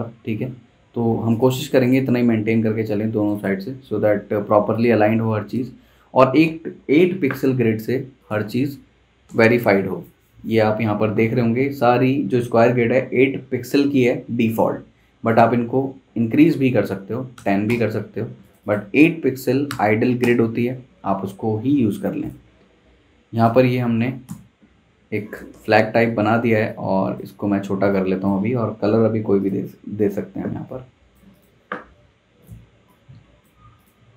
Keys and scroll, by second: 9.2 super+', 17.0-17.9 typing, 19.7 typing, 20.2 Return, 24.2 super+', 24.7 z, 25.5 v, 27.4 super+z.